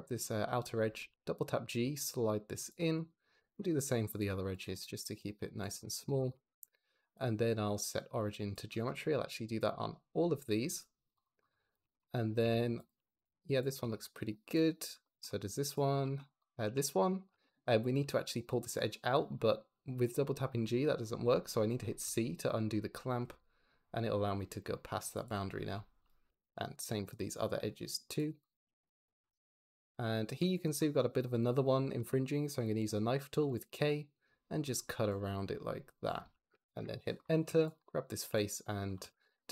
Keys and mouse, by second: 0.7 g, 1.0 g, 2.5 shift+click, 2.8 click, 3.2 g, 3.4 g, 4.0 shift+click, 4.4 click, 4.6 g, 4.8 g, 5.9 Tab, 6.9-8.4 drag, 9.6-10.7 drag, 11.5 click, 12.3 Tab, 12.7 click, 12.8 g, 13.0 g, 13.5 shift+click, 13.7 Tab, 14.0 shift+click, 14.4 click, 14.9 shift+middle click, 16.3 click, 16.5 Tab, 17.8 g, 18.0 g, 21.9 c, 25.9 click, 26.1 g, 26.3 g, 26.7 c, 27.1 shift+middle click, 28.0 shift+click, 28.0 shift+middle click, 28.3 click, 28.5 g, 28.7 g, 29.0 c, 32.6 k, 33.3 click, 34.0 click, 34.5 click, 35.0 click, 35.8 click, 36.6 Return, 37.3 3, 37.6 click, 38.1 x, 38.9 ctrl+z, 39.1 x.